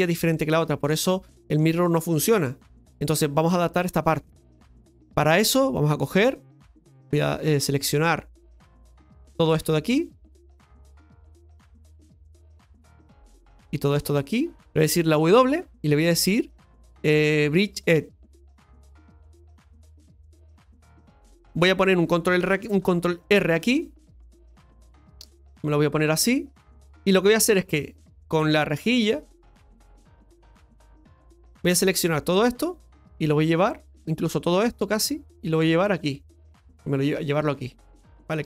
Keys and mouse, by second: 1.0 middle click, 4.2 middle click, 5.3 middle click, 6.5 right click, 7.2 shift+right click, 8.3 click, 9.1 right click, 9.8 shift+right click, 10.9 shift+right click, 11.4 shift+right click, 12.2 shift+right click, 12.8 shift+right click, 13.7 shift+right click, 14.3 shift+right click, 14.6 ctrl+z, 14.6 f, 21.0 middle click, 24.3 middle click, 25.0-26.3 drag, 29.3 click, 31.7 click, 34.0 click, 35.6-38.3 drag.